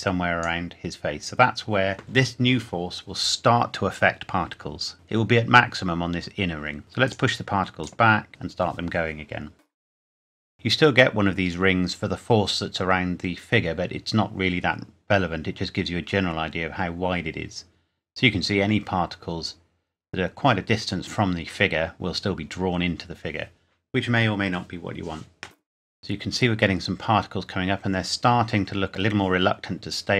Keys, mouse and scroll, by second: 0.8-1.3 scroll up 1, 6.8 scroll down 1, 7.0 click, 10.4 click, 10.7 scroll down 1, 21.0-21.4 scroll up 1, 26.4 scroll up 1.